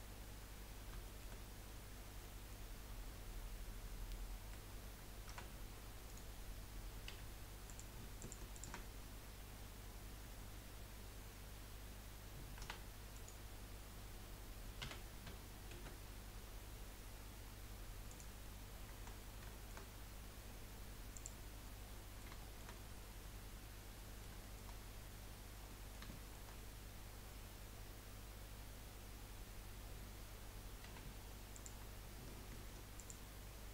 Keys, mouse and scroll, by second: 0.5-2.2 scroll up 2, 1.2 shift+middle click, 2.2-5.4 middle drag, 5.4 r, 7.1 3, 7.6 click, 8.2 alt+shift+click, 8.5 alt+shift+click, 8.9 scroll up 1, 12.6 e, 15.0 s, 18.4-21.2 middle drag, 21.2 click, 21.6-24.4 middle drag, 24.4 shift+scroll up 1, 24.6 shift+middle click, 25.2-25.7 scroll up 2, 25.7-29.2 middle drag, 30.9 2, 31.5 click, 33.0 alt+shift+click.